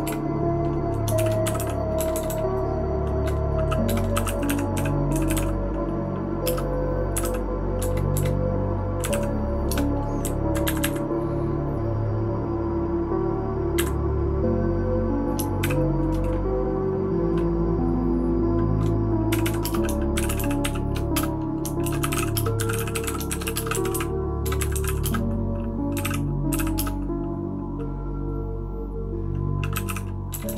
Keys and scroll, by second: 0.0-7.7 typing, 8.8-10.8 typing, 13.7 Up, 15.6 0, 19.4-27.0 typing, 29.5-30.5 typing.